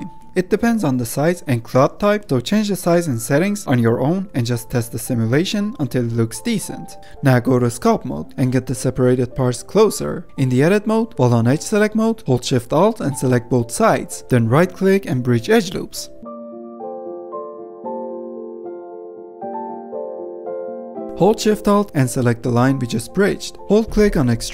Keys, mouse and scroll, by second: 0.0 click, 0.2-0.7 middle drag, 0.7 space, 6.9-7.3 scroll up 3, 7.3 ctrl+Tab, 8.3 middle click, 8.4 click, 9.2 middle click, 9.4 click, 9.6 middle click, 9.8 click, 10.4 ctrl+z, 10.4 click, 11.1 ctrl+Tab, 11.6 middle click, 12.0 Tab, 12.4 2, 13.0 alt+click, 14.0 alt+shift+click, 14.7-16.0 right drag, 16.0 middle click, 16.4 Tab, 16.6 2, 16.8 alt+shift+click, 17.2 right click, 17.7 middle click, 18.4 alt+shift+click, 18.7-19.4 right drag, 19.4 middle click, 19.6 scroll down 1, 19.8 middle click, 20.0 ctrl+Tab, 20.2-22.3 middle drag, 22.3 ctrl+z, 23.1 alt+shift+click, 23.3-24.5 scroll down 1.